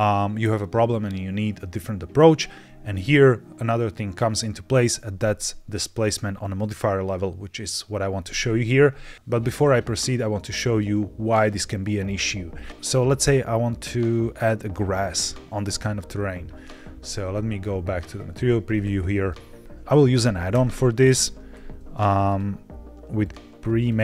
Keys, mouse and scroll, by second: 16.9 z, 18.6 middle click, 20.6 e, 22.2 click, 23.1 click, 23.4 click, 23.5 click.